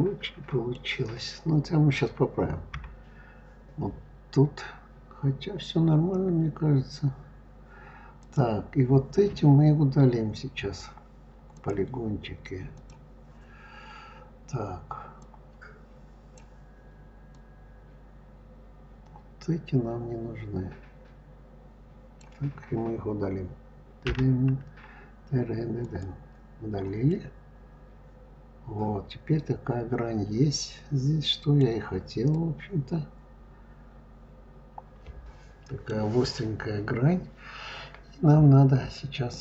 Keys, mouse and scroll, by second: 2.6 KP_3, 4.1-4.6 scroll up 3, 8.0 click, 11.4 click, 12.6 click, 15.0-20.2 drag, 23.9 Delete, 26.9-29.9 middle drag, 31.6-32.1 scroll down 3, 32.1-35.2 middle drag, 36.2-39.1 scroll up 4, 39.1 click.